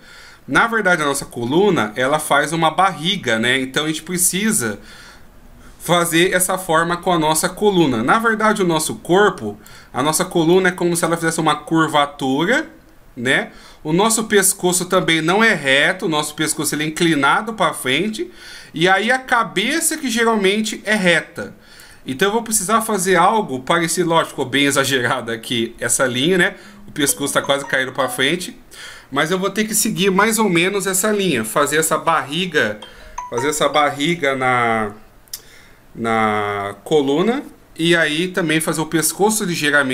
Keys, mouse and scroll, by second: 0.0-1.2 d, 1.2 click, 4.0 d, 4.2-4.7 d, 4.6 right click, 9.9 d, 10.5 d, 10.7 click, 14.3-15.2 d, 15.2 click, 17.7-18.1 d, 18.3 d, 18.3-19.2 d, 19.2 click, 22.0 d, 22.1 d.